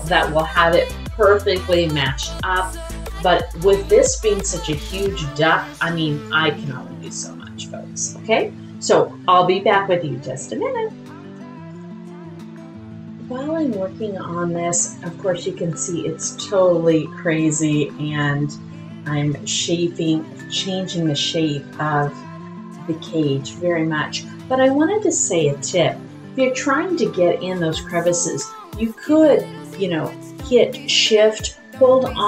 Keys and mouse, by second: 3.5-5.4 middle drag, 6.2-7.8 drag, 14.5-19.7 middle drag, 23.4-25.6 drag, 23.4 middle click.